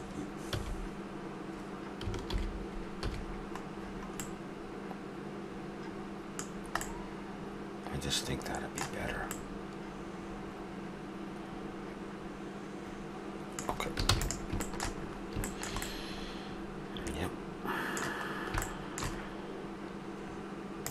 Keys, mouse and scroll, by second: 0.5 click, 0.5 h, 2.3 alt+h, 3.0 a, 3.8-4.7 middle drag, 6.9-8.5 middle drag, 9.0-11.0 middle drag, 14.1 ctrl+s, 14.6-15.0 drag, 15.1-15.6 middle drag, 16.1-17.7 middle drag, 18.2 middle click, 18.7-20.9 middle drag.